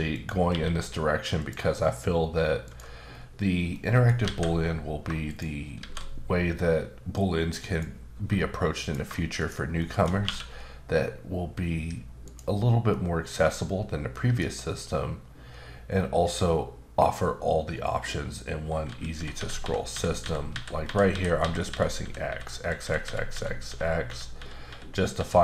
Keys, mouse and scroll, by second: 0.1 click, 0.5 q, 1.4 click, 2.6 click, 3.1-3.7 scroll down 3, 3.7 scroll up 1, 3.7 middle click, 4.3 alt+a, 5.3 shift+right click, 5.8 shift+a, 7.1 click, 8.1 s, 8.8 click, 9.4 shift+click, 9.8 shift+middle click, 10.2 q, 12.2 click, 12.9 middle click, 15.2-17.1 scroll down 4, 17.7-18.8 scroll down 8, 18.8-20.8 typing.